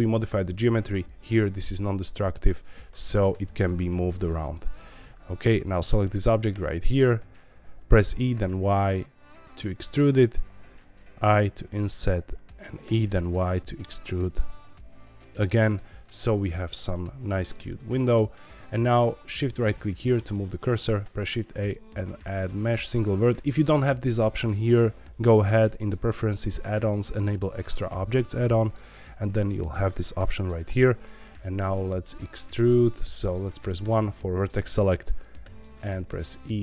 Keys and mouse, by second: 1.6 click, 2.4 shift+click, 2.8 g, 3.0 y, 4.2 Escape, 4.7 middle click, 5.4 click, 6.1 middle click, 6.5 Tab, 7.1 a, 7.6 ctrl+z, 7.9 e, 8.3 y, 10.2 click, 10.6 i, 12.5 click, 12.8 e, 13.1 y, 15.4 click, 15.6 Tab, 17.6 middle click, 20.1 middle click, 20.4 shift+middle click, 20.8 shift+a, 30.2 middle click, 31.3 shift+middle click, 31.7 middle click, 35.4 e.